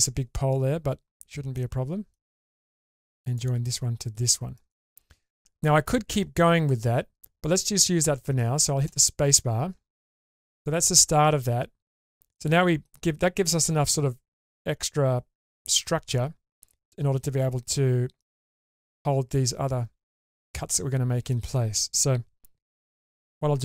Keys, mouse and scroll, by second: 1.5-9.5 shift+middle drag, 10.1-12.4 middle drag, 18.3-18.6 shift+middle drag, 18.8-21.3 middle drag.